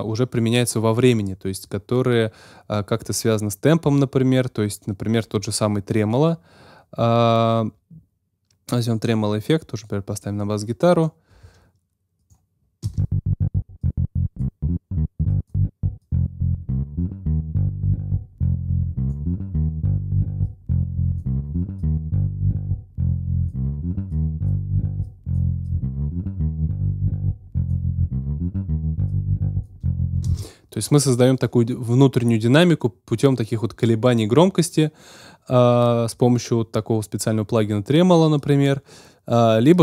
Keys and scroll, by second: 12.8 space, 30.2 space.